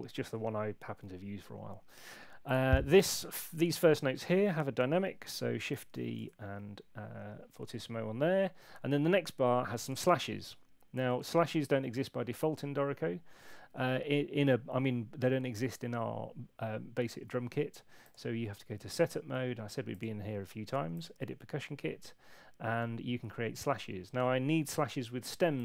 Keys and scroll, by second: 5.7 shift+d.